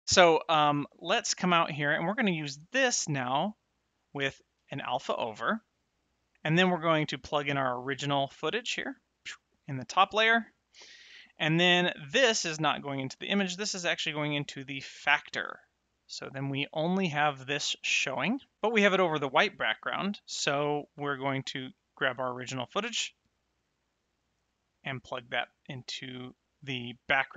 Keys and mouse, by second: 0.0 Tab, 0.2 middle click, 2.3 click, 3.3 middle click, 4.5 shift+a, 5.8 click, 7.5 click, 13.2 click, 21.7 middle click, 23.8 click.